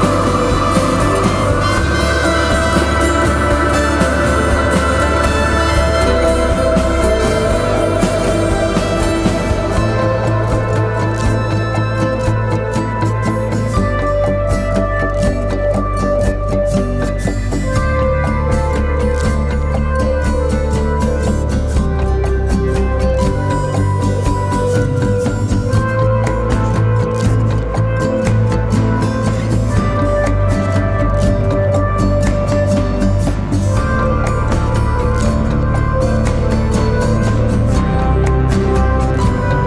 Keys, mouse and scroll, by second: 2.1 double click, 10.3-10.7 typing, 18.5-19.6 scroll up 1, 19.6 typing, 37.6 double click.